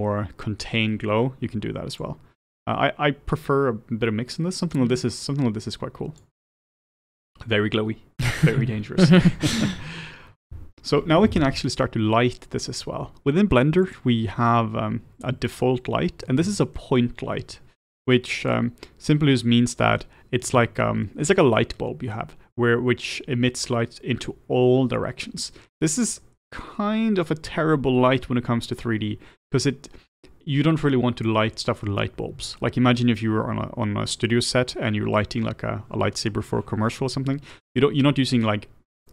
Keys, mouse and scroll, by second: 2.2-5.0 drag, 14.0 click, 15.6-39.1 middle drag.